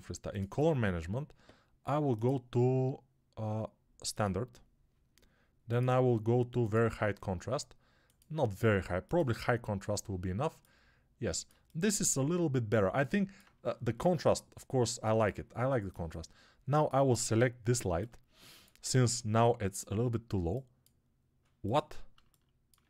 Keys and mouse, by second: 18.5-22.0 alt+drag, 18.5-22.8 alt+middle drag, 18.5-22.8 alt+right drag.